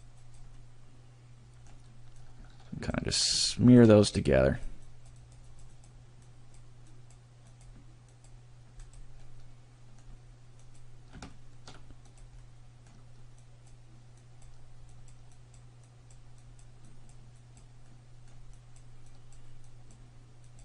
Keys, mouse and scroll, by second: 0.2 click, 0.6 middle click, 2.2 click, 3.2 click, 3.6 shift+middle click, 4.1 click, 5.0 click, 5.4 click, 5.6 click, 5.8 click, 6.2 click, 7.0 click, 7.6 click, 8.1 click, 8.8 click, 9.3 middle click, 10.6 click, 11.3 shift+middle click, 12.0 click, 12.4 middle click, 13.4 click, 14.2 click, 14.9 click, 15.5 click, 15.9 click, 16.4 click, 16.9 click, 17.4 click, 17.9 middle click, 18.6 click, 19.1 click, 19.6 click, 20.4 click.